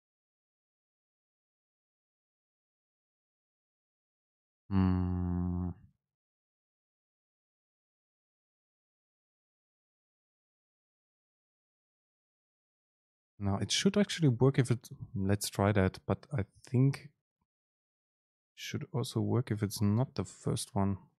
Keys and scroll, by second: 13.1 alt+Return.